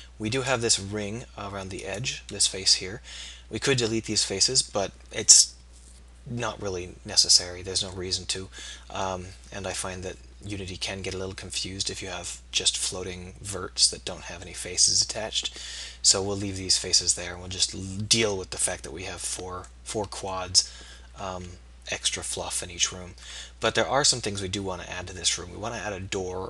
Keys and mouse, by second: 2.9-8.2 middle drag, 8.4-11.2 middle drag, 11.7-13.5 middle drag, 14.5-16.8 middle drag, 23.0 middle click.